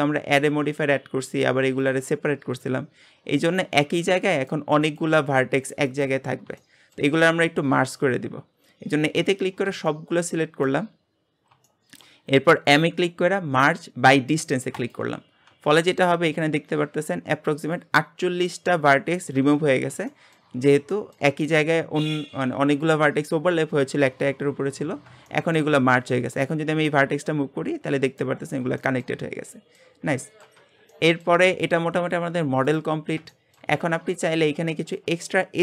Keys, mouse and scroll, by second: 0.3 g, 1.8 click, 2.5 g, 4.9 click, 5.1 g, 6.3 scroll up 1, 6.6 shift+middle click, 7.2-8.5 scroll up 1, 8.5-9.2 scroll down 4, 9.2 a, 9.6 scroll down 3, 9.9-11.1 shift+middle drag, 11.1-11.7 scroll up 3, 11.7-12.7 shift+middle drag, 12.7 m, 19.8 scroll down 1, 20.1-21.4 shift+middle drag, 21.4-23.1 scroll up 1, 25.1 scroll up 2, 25.3 shift+middle click, 25.8-26.4 scroll up 1, 26.4 click, 26.7 g, 28.5-28.8 scroll down 1, 28.8 shift+middle click, 29.3-30.2 scroll down 5, 29.6 middle click, 30.2 shift+middle click, 30.6 Tab, 30.9 middle click, 31.5 g, 33.3 shift+middle click, 33.9 Tab, 34.3 scroll up 1, 34.7 shift+middle click, 35.1-35.6 scroll up 1.